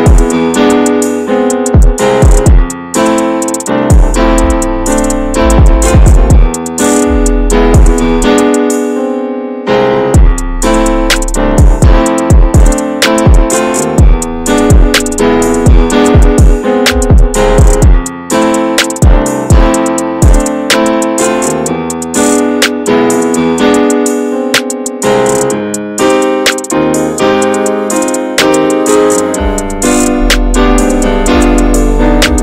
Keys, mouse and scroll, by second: 2.7 click, 3.4-4.4 drag, 4.4 middle click, 5.2-6.4 drag, 6.4-7.4 middle drag, 7.4 scroll up 1, 7.6-10.4 shift+middle drag, 10.4-12.4 drag, 12.4-13.9 shift+middle drag, 13.9-15.5 drag, 15.5 ctrl+z, 15.9 s, 17.0-18.0 middle drag, 18.0 3, 18.2 click, 18.6 alt+shift+click, 19.0 middle click, 19.5 click, 20.3-21.5 middle drag, 21.5 1, 21.7 click, 22.0 Tab, 22.2 click, 22.3 ctrl+a, 22.6 Tab, 23.2 3, 23.3 click, 24.0 2, 24.1 click, 24.5 alt+shift+click, 25.2 ctrl+b, 28.0-30.9 typing, 28.0 click, 29.4 click, 30.2 click, 30.5 alt+shift+click, 31.9 ctrl+b.